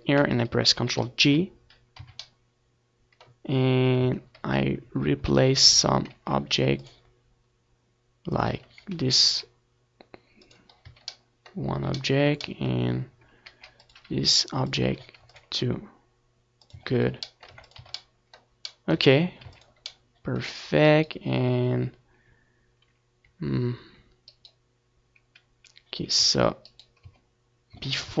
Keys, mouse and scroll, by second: 1.0 Tab, 2.7 a, 3.1 ctrl+r, 5.5-7.4 drag, 5.5 a, 6.1 ctrl+r, 7.7-9.5 drag, 8.1 a, 8.3 middle click, 10.7 ctrl+r, 11.4 click, 12.2-14.1 drag, 12.2 a, 12.6 ctrl+r, 14.2-15.6 drag, 14.3 Tab, 14.5 z, 14.9 ctrl+s, 15.5 z, 16.2 middle click, 16.4 a, 16.9 ctrl+s, 18.8-20.3 right drag, 20.3-23.0 middle drag, 23.0 right click, 24.0 z, 24.9-26.2 right drag, 25.0 Tab, 25.6 Tab, 25.9 ctrl+z, 26.2 ctrl+z, 26.7 ctrl+z, 27.6-28.2 middle drag.